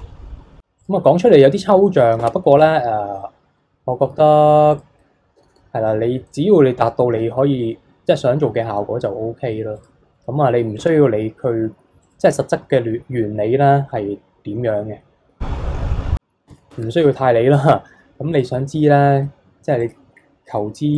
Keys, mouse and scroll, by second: 0.8-2.2 drag, 2.2 Tab, 4.7 click, 5.4 g, 7.2 g, 10.8 Tab, 12.0-15.0 drag, 15.7 ctrl+r, 16.7 Tab, 18.3 click, 19.1 ctrl+r.